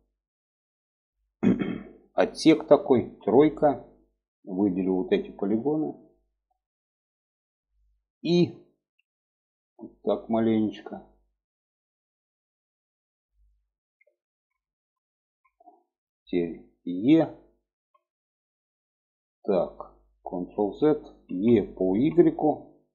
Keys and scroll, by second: 2.5 3, 8.3 i, 17.2 e, 20.0 ctrl+z, 20.8 e.